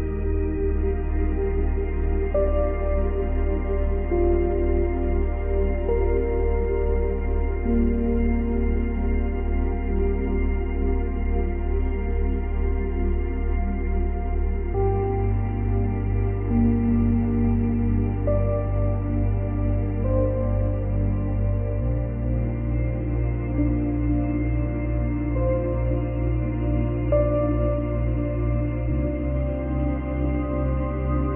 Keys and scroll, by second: 5.0 space, 11.4 space, 28.3 space.